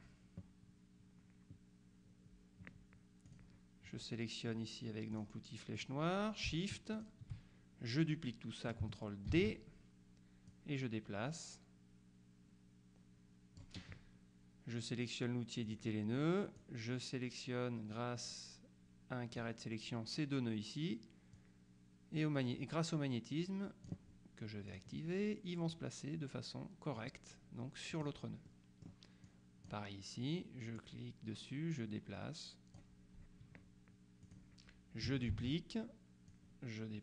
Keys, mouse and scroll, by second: 3.4 click, 5.2 click, 5.8 click, 7.0 shift+click, 9.4 ctrl+d, 10.6-14.2 drag, 15.8 click, 16.7-20.0 drag, 21.4-24.4 drag, 24.8 click, 25.8-27.6 drag, 28.0 click, 29.4 click, 30.9-33.4 drag, 34.3 click, 35.4 ctrl+d, 36.4-37.0 drag.